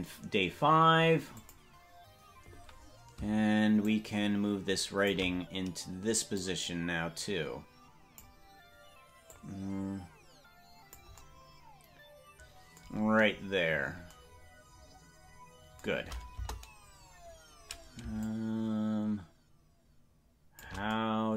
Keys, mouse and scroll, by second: 1.3 click, 3.8-5.1 shift+drag, 6.4-8.2 drag, 9.3-11.0 drag, 16.4 KP_0, 18.2-20.6 shift+drag.